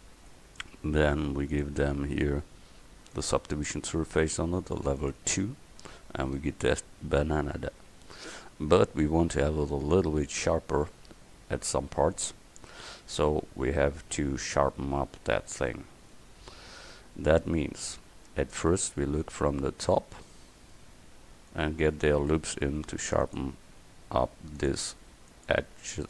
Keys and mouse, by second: 5.9-7.0 middle drag, 7.8 KP_1, 12.8 Tab, 16.2-17.2 middle drag, 17.6 middle click, 22.8 ctrl+r, 25.1 ctrl+r.